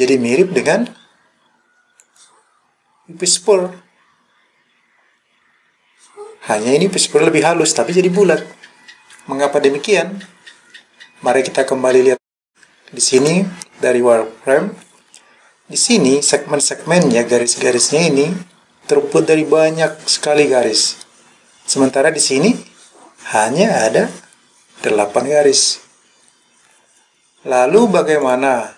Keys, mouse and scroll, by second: 2.0 click, 13.2 click, 28.3 click.